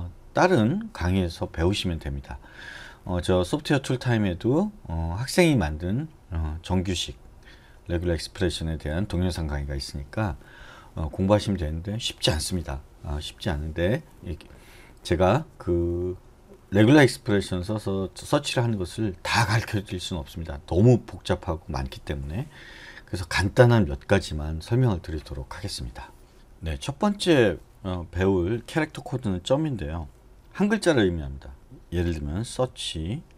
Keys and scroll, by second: 32.6 /.